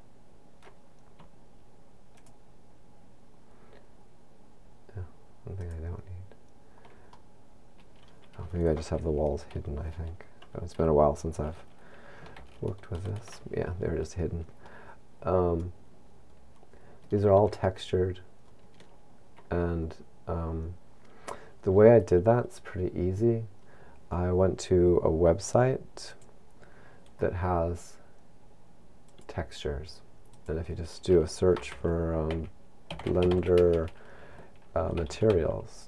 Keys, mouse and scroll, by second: 2.5 shift+click, 6.0 shift+click, 7.5 middle click, 12.4 alt+h, 15.3 middle click, 18.1 shift+middle click.